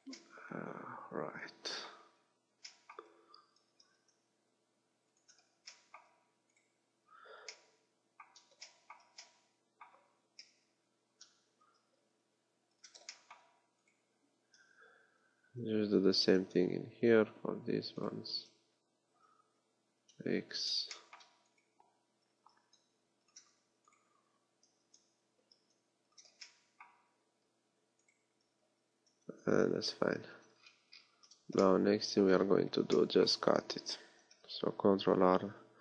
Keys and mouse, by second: 3.7 g, 6.6 click, 10.5 KP_7, 11.8 g, 14.0 click, 14.6 g, 17.0 KP_1, 18.4 g, 22.4 g, 24.8 g, 26.2-28.0 drag, 28.9 g, 30.6 click, 31.2 z, 34.8 ctrl+r.